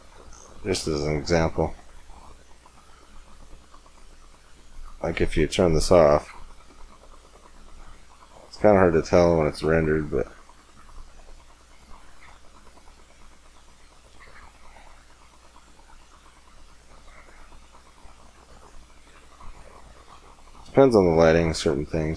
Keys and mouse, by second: 4.4-6.0 drag, 8.4-9.8 middle drag, 12.0-16.0 drag, 16.6-17.8 drag, 17.8 middle click, 20.7-22.1 middle drag.